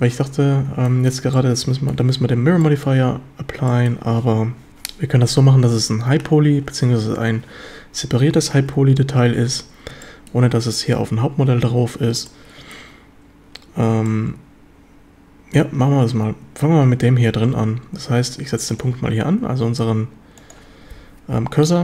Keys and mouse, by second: 0.9 shift+middle click, 1.4-2.0 shift+middle drag, 2.7 shift+middle drag, 3.7 shift+drag, 10.1 shift+drag, 11.0 z, 11.8 z, 12.3 shift+click, 14.1-15.6 shift+drag, 18.7 click, 19.7 z, 20.4 click, 20.9 z.